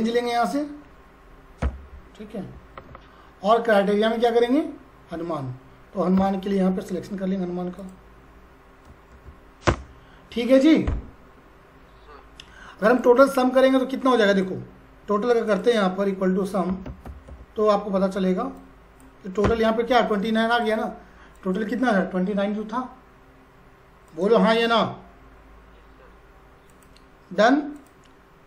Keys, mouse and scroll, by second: 0.5 click, 1.6 ,, 2.8 shift+', 7.8 click, 9.1 shift+0, 9.6 Return, 12.9-15.5 drag, 16.5-17.8 typing, 18.6 click, 19.5 Return, 20.5 click, 24.0 click, 26.7 click.